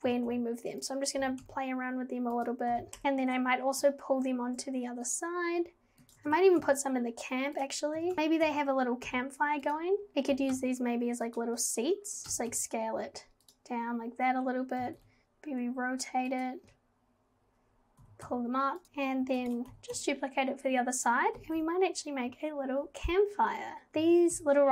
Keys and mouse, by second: 0.1 x, 0.1 g, 1.2 g, 2.7 g, 6.1 shift+d, 6.3 g, 8.0 g, 8.4 g, 10.1 g, 10.3 g, 12.2 g, 14.8 g, 18.0 g, 18.8 shift+g, 19.4 alt+click, 19.4 alt+d, 21.4 g, 23.9 z, 24.0 g.